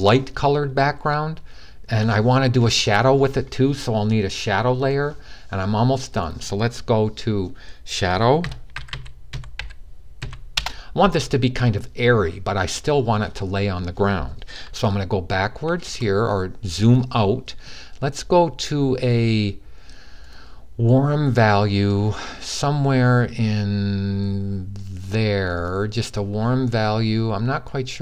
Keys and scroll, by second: 7.9-9.9 typing.